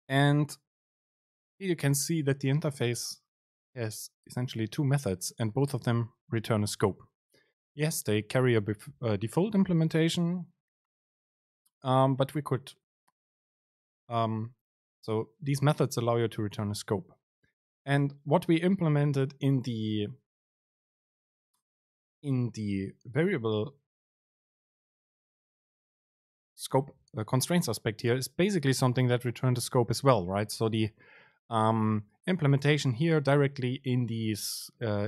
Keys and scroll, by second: 24.6 super+z.